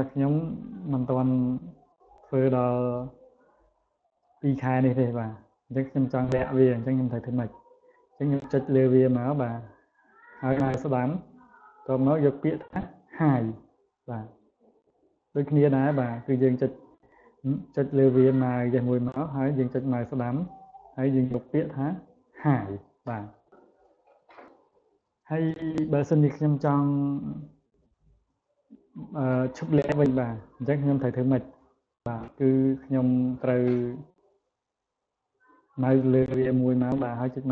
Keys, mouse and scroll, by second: 1.9 right click, 4.0 click, 4.7 click, 5.2 click, 5.9 click, 6.5 click, 7.0 click, 8.4 click, 10.3 right click, 13.4 click, 15.1 click, 18.0 click, 19.8 right click, 22.1 click, 31.2 click, 35.5 click, 37.2 right click.